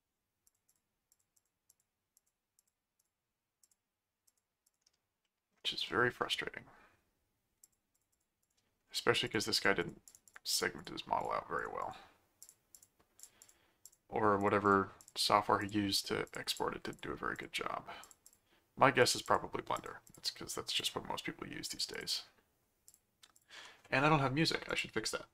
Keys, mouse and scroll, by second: 0.4-3.5 drag, 3.6 click, 4.3 click, 5.2 middle click, 6.1 middle click, 7.6 click, 9.2-12.3 drag, 12.4-15.5 drag, 15.6 click, 16.3-17.9 drag, 18.0 click, 19.0-20.6 drag, 20.8 click, 21.7 click, 22.9 click, 24.6 click.